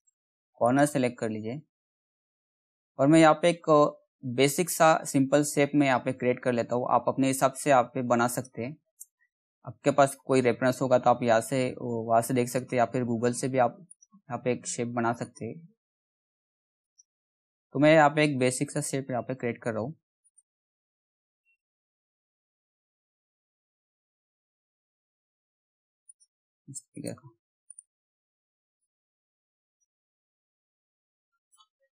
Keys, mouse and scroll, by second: 1.6-2.1 scroll up 1, 2.1-3.0 scroll down 1, 3.0 middle click, 5.4 middle click, 7.9 shift+click, 8.9 scroll up 1, 10.1 shift+scroll up 1, 12.2 shift+click, 26.6 right click, 28.4 click.